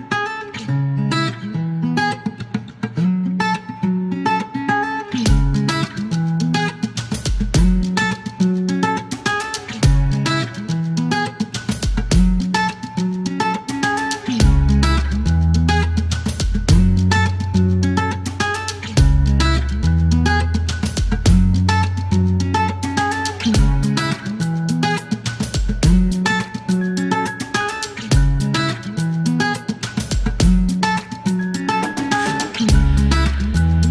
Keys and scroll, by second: 10.7 KP_4, 11.1 KP_4, 20.4 KP_0, 27.9 KP_0, 29.7-31.1 typing, 31.3 Return, 33.6 KP_0.